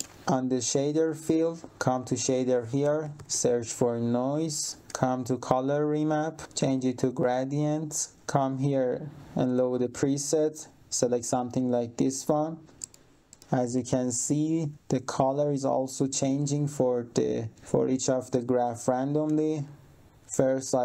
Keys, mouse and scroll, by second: 0.1 click, 1.0-1.4 scroll down 1, 1.9 click, 2.5-3.7 typing, 4.2 click, 4.8 click, 6.5 click, 7.8-8.1 scroll down 1, 8.5 click, 11.5 click, 12.1 click, 12.7 middle click, 13.5 middle click, 13.6 3, 13.7 click, 20.6 click.